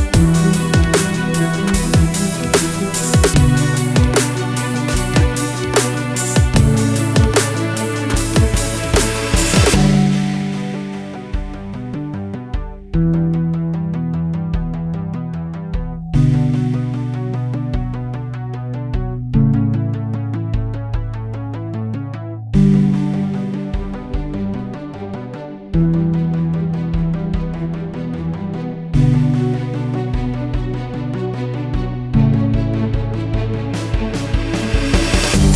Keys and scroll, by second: 2.3-2.7 typing, 13.0 ctrl+a, 13.9-15.1 typing, 19.8-21.2 typing, 32.1-32.8 typing, 33.8 Up, 33.8 Return.